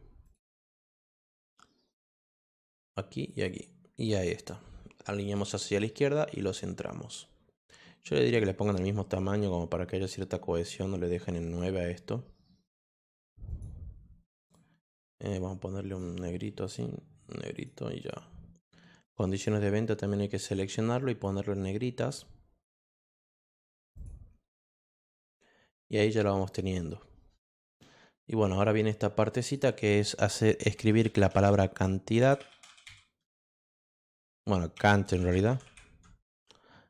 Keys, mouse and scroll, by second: 0.2 click, 0.7 click, 2.6 click, 3.1 click, 4.1 click, 5.2 click, 8.2 click, 8.6 click, 11.4 click, 12.9 click, 13.4 click, 14.4 click, 14.8 click, 15.9 click, 16.6 click, 17.5 click, 18.0 click, 19.3 click, 22.0 click, 23.3 click, 23.9 click, 29.4 click, 30.7-33.0 typing, 34.8-36.0 typing.